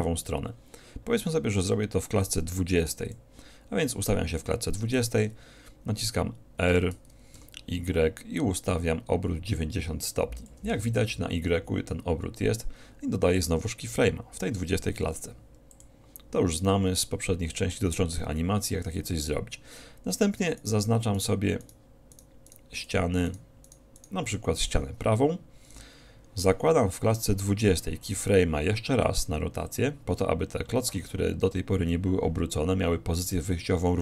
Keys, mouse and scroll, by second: 2.3-4.1 drag, 6.9 r, 10.7-12.5 drag, 15.1 i, 20.7-25.1 right drag, 28.3 i.